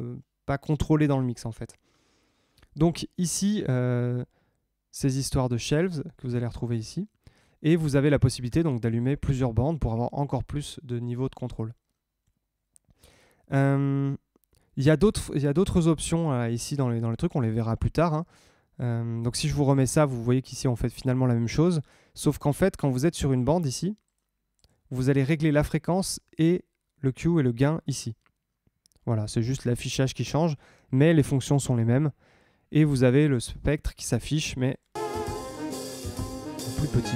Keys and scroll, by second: 34.9 space.